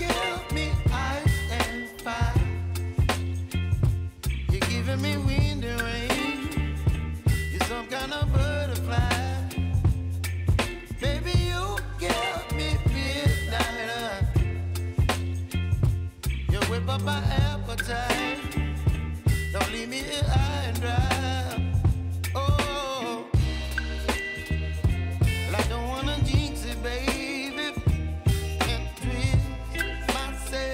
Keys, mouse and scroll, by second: 2.1 space, 5.3-10.2 drag, 14.0 space, 16.4 click, 17.0 ctrl+c, 17.8 click, 18.3 ctrl+v, 19.6 click, 20.1 space, 22.0 click, 22.5 space, 24.6 space.